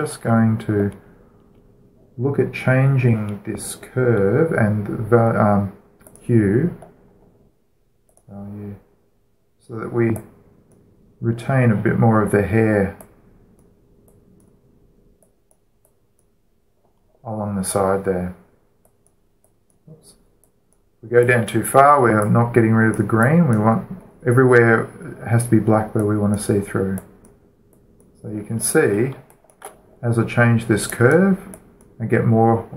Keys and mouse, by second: 0.8-3.0 middle drag, 4.4-6.9 middle drag, 6.9-8.7 drag, 8.7 middle click, 8.9-10.8 drag, 11.0-13.3 drag, 13.8-18.8 drag, 19.7-26.0 drag, 26.8 click, 30.1 alt+shift+middle click, 30.2-31.7 alt+shift+middle drag, 31.7 click.